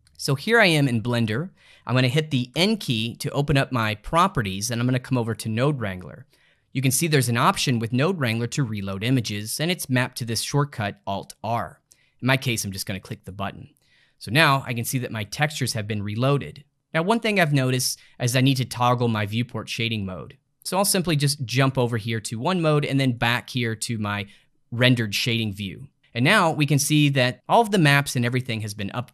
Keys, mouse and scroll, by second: 0.6-2.5 ctrl+middle drag, 2.5 n, 5.1 click, 6.5-7.1 scroll down 5, 13.1 click, 21.7 click, 23.0 click.